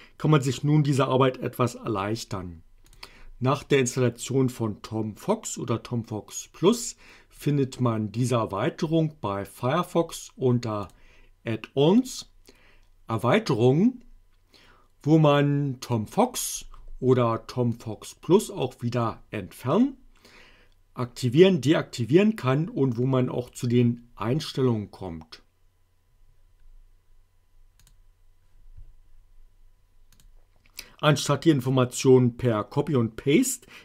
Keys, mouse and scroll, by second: 7.3 click, 10.8 click, 17.7-18.5 drag, 23.5 click, 27.7 click.